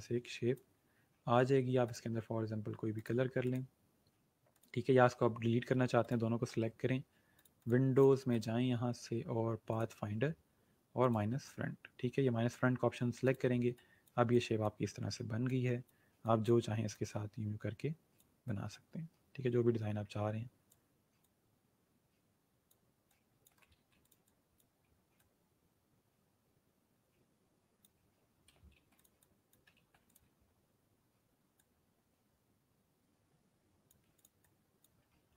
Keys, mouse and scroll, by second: 13.2 click, 28.7 ctrl+g, 28.9 click, 29.7 ctrl+g, 30.0 click, 30.6-31.3 alt+scroll down 3, 31.5-34.0 alt+drag.